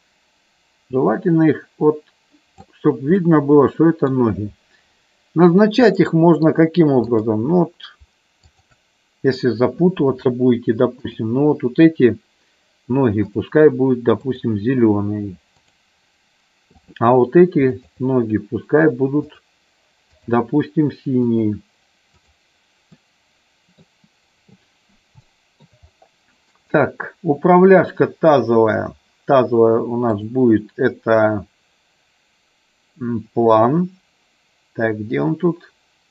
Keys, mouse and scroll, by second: 3.4 middle click, 6.0 middle click, 7.0 click, 8.5 shift+click, 13.2-14.5 drag, 15.6 click, 16.7 click, 17.7 shift+click, 19.3 click, 20.1-21.5 drag, 22.9 middle click, 25.2 shift+middle click, 26.7-27.9 drag, 30.1-36.1 drag.